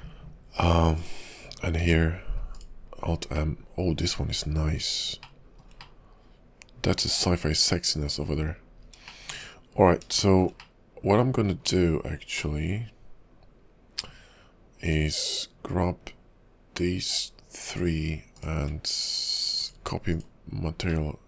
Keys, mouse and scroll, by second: 1.0 click, 1.8 alt+m, 3.5 middle click, 4.3 scroll down 1, 4.5-5.0 scroll up 6, 5.0 scroll down 1, 5.4 shift+middle click, 5.9 scroll up 1, 6.1 middle click, 6.4-6.8 scroll down 2, 8.4-9.3 scroll down 10, 9.3 shift+middle click, 9.5-10.1 scroll up 5, 10.3 shift+middle click, 10.7 middle click, 11.8-12.5 scroll down 3, 12.5 middle click, 14.9 click, 17.7 shift+click, 18.3 shift+click, 19.5 click, 21.0 middle click.